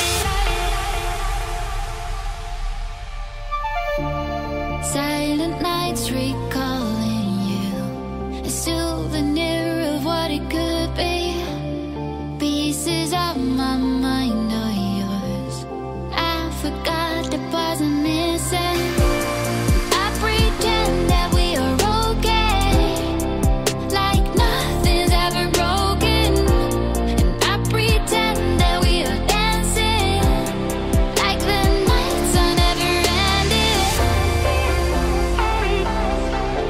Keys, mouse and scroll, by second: 1.2 click, 3.3 g, 4.0 z, 8.7 click, 9.4 ctrl+z, 9.7 ctrl+z, 11.1 click, 11.6 click, 13.2 s, 14.2 click, 14.7 click, 15.3 Tab, 16.7 s, 17.9 z, 20.5 click, 26.2-27.2 drag, 28.0 click, 28.8 right click, 31.0-31.6 drag, 33.0 click, 36.3 g.